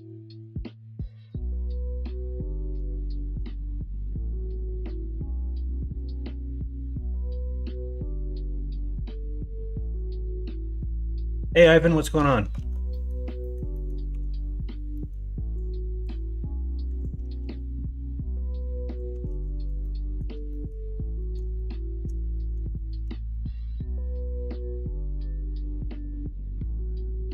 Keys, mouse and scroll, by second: 0.2 middle click, 2.1 click, 3.5 middle click, 6.1 alt+z, 6.8 middle click, 7.7-8.9 middle drag, 9.4 shift+middle click, 10.2 middle click, 10.9 middle click, 11.3 middle click, 12.5 alt+z, 12.9 middle click, 13.4 middle click, 14.1 3, 14.9 middle click, 15.6-19.2 drag, 19.2 alt+z, 19.8 middle click, 20.5 middle click, 21.2 shift+middle click, 22.3 middle click, 22.7 shift+middle click, 23.3 middle click, 26.6-27.3 middle drag.